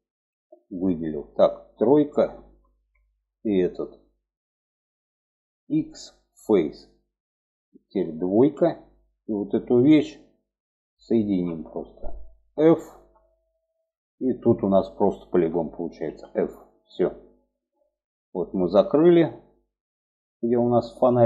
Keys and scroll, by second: 0.3 3, 5.0 x, 7.7 2, 12.3 f, 15.4 f.